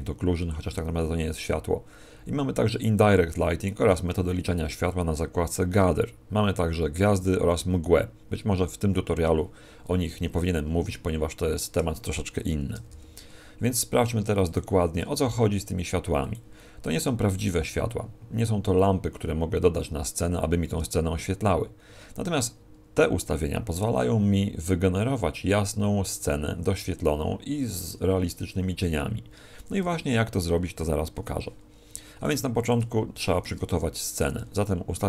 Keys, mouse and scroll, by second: 12.7 r, 14.5 click, 15.0 r, 16.3 click, 29.8 f, 32.3 right click, 32.5 x, 34.1 right click, 34.4 g.